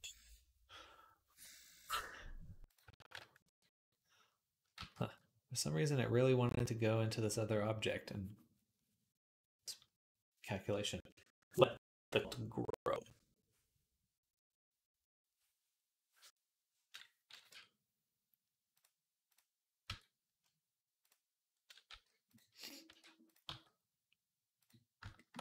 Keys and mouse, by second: 0.0-3.9 drag, 3.9-13.3 middle drag, 15.1 ctrl+z, 17.5 Tab, 18.6 click, 19.7 Tab, 20.8-22.1 drag, 21.7 g, 22.1-25.4 middle drag, 22.7 r, 23.3 g.